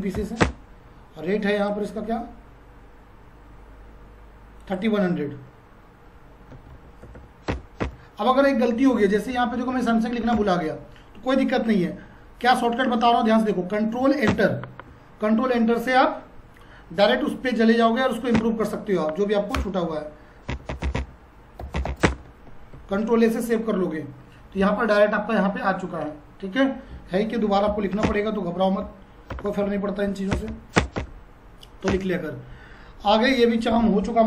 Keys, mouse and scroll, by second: 0.0-0.2 typing, 0.4 Return, 1.6 click, 4.6 click, 6.2-7.7 typing, 10.4 Return, 14.0 Return, 18.4 End, 19.6-22.3 typing, 22.7 ctrl+a, 27.2-30.5 typing, 30.7 Return, 33.3 click.